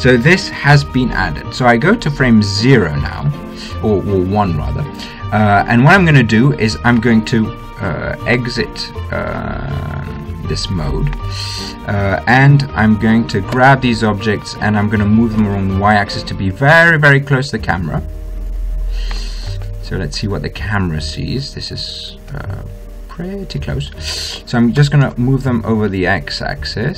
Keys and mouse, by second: 3.4-5.3 drag, 8.0-13.9 middle drag, 14.4 g, 22.1 click, 23.2 click, 25.7 g.